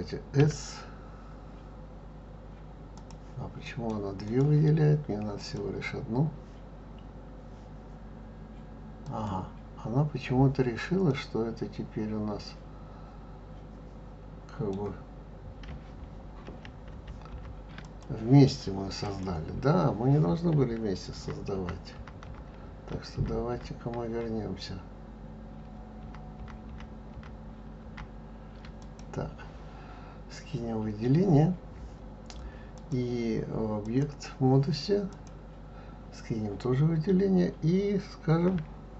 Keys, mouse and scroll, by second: 0.4 s, 3.6 middle click, 4.2 click, 5.4 click, 9.0 click, 11.0-14.1 middle drag, 16.4 ctrl+j, 16.9 ctrl+j, 17.8 click, 19.0 click, 21.1 ctrl+z, 21.5 ctrl+z, 21.9 ctrl+z, 22.2 ctrl+z, 22.7 ctrl+z, 23.1 ctrl+z, 23.5 ctrl+z, 24.1 ctrl+z, 25.6 ctrl+z, 26.0 ctrl+z, 26.3 ctrl+z, 26.7 ctrl+z, 27.1 ctrl+z, 27.8 ctrl+z, 28.8 click, 32.7-35.2 drag.